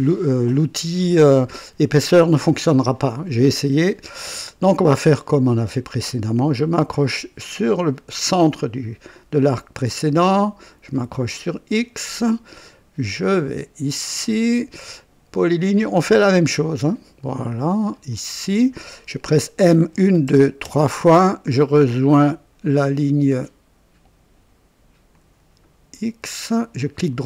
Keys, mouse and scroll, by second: 4.4 click, 8.3 click, 11.3 click, 13.9 click, 15.5 click, 16.7 click, 18.0 click, 19.9-20.6 typing, 25.1 click, 26.8 right click.